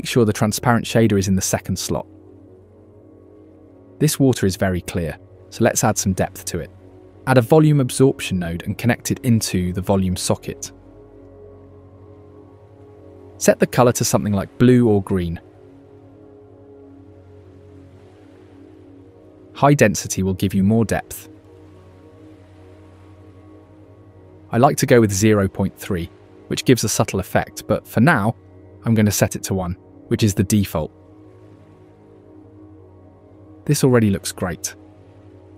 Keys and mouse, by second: 0.2-1.7 drag, 2.6 click, 5.4 click, 5.6 click, 5.8 click, 6.4 click, 7.0 shift+a, 10.0-11.4 drag, 14.2 click, 20.0-21.4 drag, 22.8 KP_Enter, 23.1 KP_Enter, 24.4 KP_Enter, 30.7 KP_Enter.